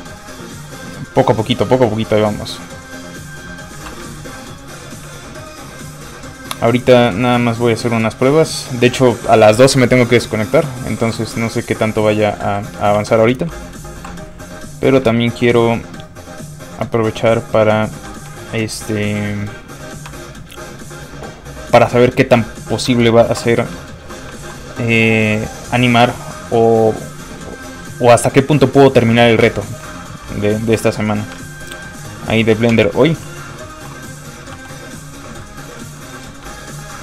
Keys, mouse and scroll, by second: 3.8 ctrl+z, 4.1 shift+middle click, 6.4-7.1 scroll down 1, 7.4 ctrl+shift+click, 9.5 shift+click, 10.6 scroll up 1, 11.2 shift+w, 11.8 shift+middle click, 12.4 ctrl+middle click, 12.5 ctrl+z, 13.0 f, 13.1 click, 14.0 alt+m, 15.3 ctrl+shift+click, 18.3 shift+click, 18.4 shift+middle click, 20.1 middle click, 20.2 w, 23.3 alt+m, 23.9 shift+middle click, 24.2 middle click, 24.3 alt+shift+middle click, 26.0 ctrl+shift+click, 29.4 shift+click, 29.5 w, 30.7 alt+m, 31.3 ctrl+m, 31.5 ctrl+shift+click, 32.7 shift+click, 32.8 w, 33.8 alt+m, 34.5 f, 34.7 click, 35.0 middle click, 36.7 ctrl+shift+click.